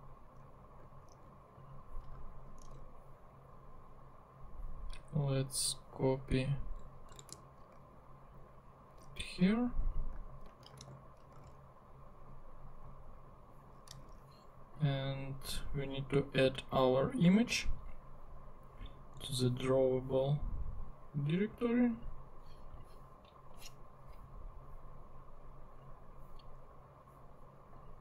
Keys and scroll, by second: 2.6 super+Tab, 7.2 super+c, 9.0 super+Tab, 10.4 super+Tab, 10.8 super+v, 11.4 super+Tab, 14.0 super+Tab.